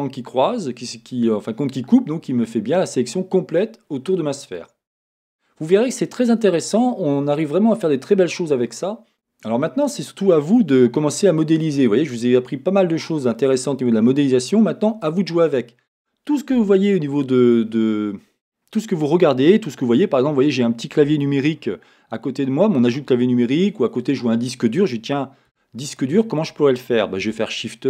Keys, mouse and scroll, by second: 4.9-8.8 scroll down 1, 8.8 scroll down 1, 9.1 Tab, 10.8 shift+middle click, 13.7-14.2 scroll down 1, 15.0 middle click, 16.1 scroll up 1, 25.5-27.8 middle drag, 25.5 x, 27.2 shift+a.